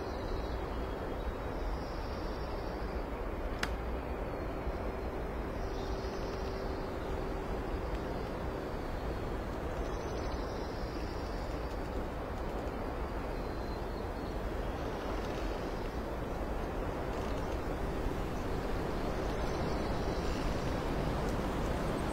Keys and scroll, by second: 0.3 space, 2.2 x, 2.9 space, 3.4 ctrl+shift+z, 3.9 ctrl+shift+space, 7.9 ctrl+alt+z.